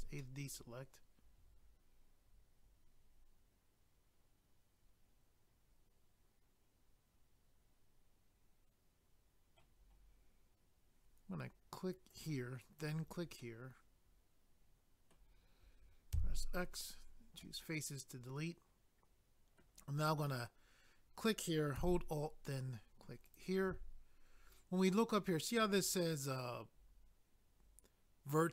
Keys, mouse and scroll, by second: 0.2 middle click, 12.1 click, 12.2 click, 12.8 click, 12.9 click, 13.4 middle click, 16.1 x, 16.8 click, 16.8 click, 17.4 middle click, 21.2 click, 21.3 click, 23.2 alt+click, 23.3 alt+click.